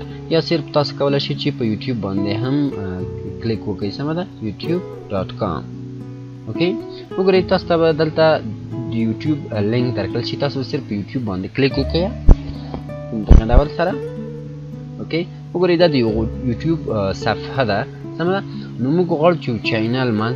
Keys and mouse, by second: 1.9-3.3 typing, 4.4 click, 9.7 click.